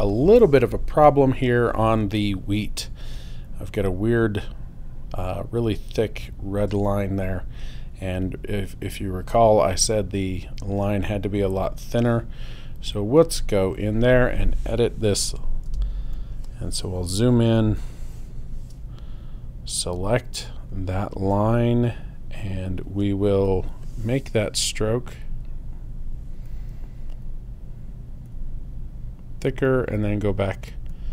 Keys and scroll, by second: 15.9 super+space.